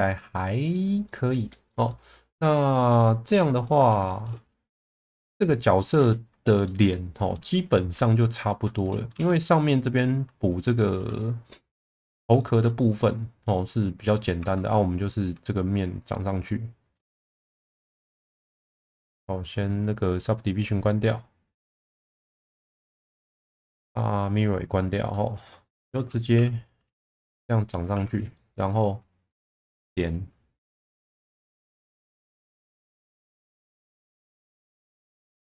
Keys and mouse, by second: 0.2-0.7 middle drag, 1.0-1.4 middle drag, 1.7 middle drag, 2.3-3.6 middle drag, 4.1 shift+middle drag, 6.6-7.3 middle drag, 8.2-8.5 middle drag, 8.8 shift+middle drag, 9.1 Tab, 10.8 shift+middle click, 12.4 shift+middle click, 12.8-14.0 middle drag, 14.4 2, 15.5 shift+click, 16.0 shift+click, 16.5 shift+click, 18.2 middle click, 20.4 click, 21.5 click, 21.8 click, 22.7 click, 23.4 shift+middle click, 23.8-25.0 middle drag, 26.3 e, 27.0 z, 27.6 click, 27.9 1, 28.3 middle click, 29.3 click, 30.8 ctrl+z, 32.2 g, 32.3 b, 34.5 click, 35.0 middle click.